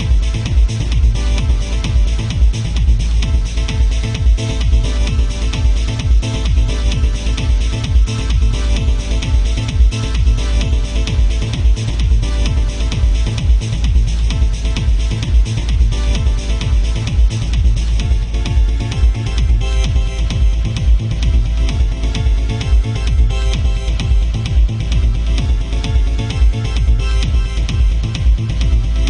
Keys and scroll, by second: 4.0 ctrl+z, 5.4 ctrl+z, 15.6 ctrl+z.